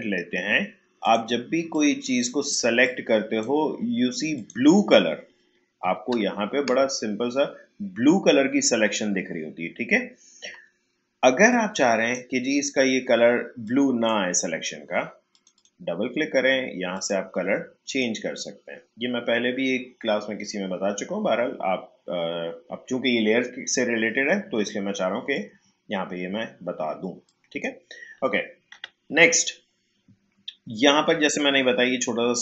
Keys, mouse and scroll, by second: 6.9 shift+scroll up 1, 10.1 shift+scroll down 1, 11.5-15.3 drag, 27.2-28.7 drag, 28.7 Delete.